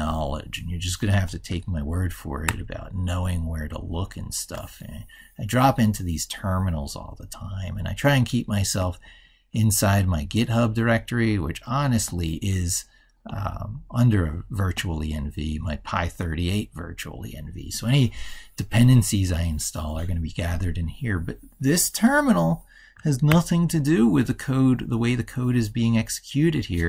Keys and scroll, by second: 2.2 ctrl+super+Right, 23.1 ctrl+super+Left.